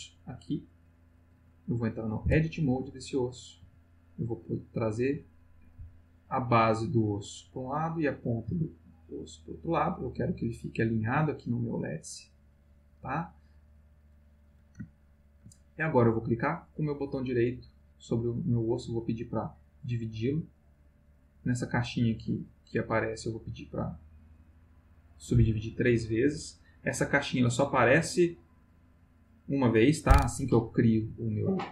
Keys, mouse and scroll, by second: 2.2 Tab, 3.3 click, 3.6 g, 4.8 click, 5.6 click, 5.7 g, 7.5 click, 8.2 click, 8.5 g, 8.9 click, 9.9-11.0 middle drag, 11.7-13.6 middle drag, 14.2 click, 15.0 ctrl+middle click, 15.5 ctrl+middle click, 16.1 right click, 17.1 click, 17.6 right click, 18.6 click, 20.3 click, 22.7 click, 23.2 click, 28.5 click.